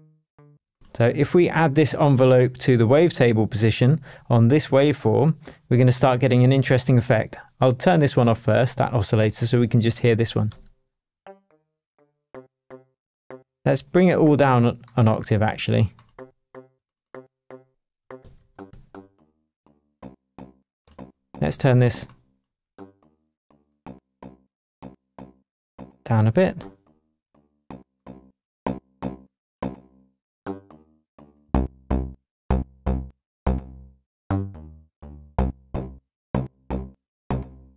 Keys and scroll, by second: 18.2 super+a, 18.5 shift+super+Down, 19.2 shift+Down, 19.6 shift+Tab.